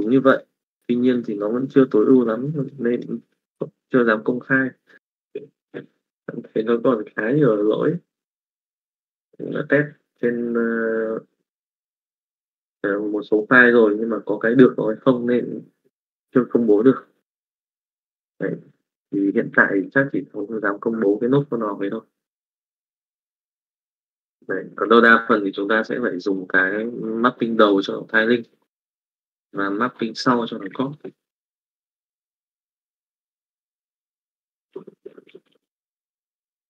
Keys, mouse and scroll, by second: 32.9 c, 33.8 click, 34.6 click.